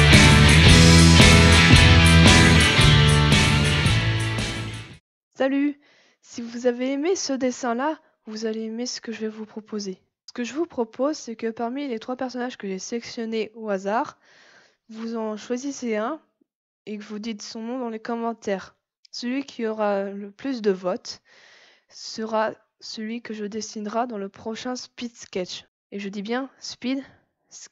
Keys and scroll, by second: 0.0-1.2 typing, 0.8 ctrl+z, 3.2 space, 4.2 ctrl+z.